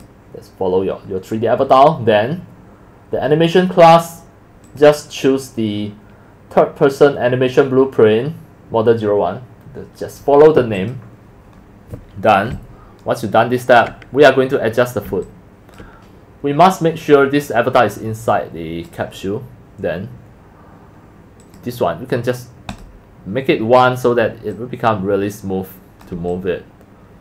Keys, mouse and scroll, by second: 0.3 click, 4.7 click, 12.5-13.9 alt+drag, 15.3 alt+click, 19.0 alt+click, 21.4 click, 22.7 click, 24.5 click, 27.1 alt+click.